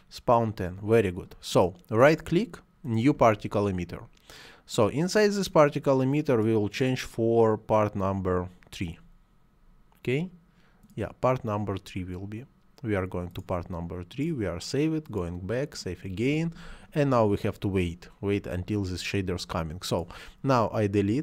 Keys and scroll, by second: 20.9 Delete.